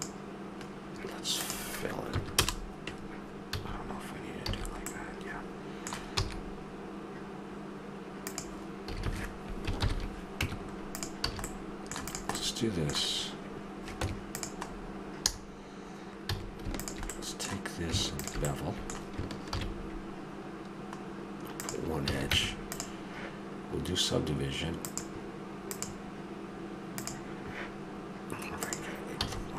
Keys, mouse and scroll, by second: 1.4-2.4 drag, 3.5 a, 4.5 a, 4.9-6.1 middle drag, 6.1 e, 8.9 a, 9.1 a, 9.8 ctrl+n, 10.4 Tab, 11.3 a, 11.4-13.1 drag, 14.0 Tab, 16.3 a, 16.8 click, 17.1-19.5 middle drag, 19.5 ctrl+b, 19.5 click, 19.8 middle click, 19.9-21.5 drag, 22.0 a, 22.3 Tab, 24.8-25.5 drag, 27.6-28.6 drag, 29.2 a, 29.5 drag.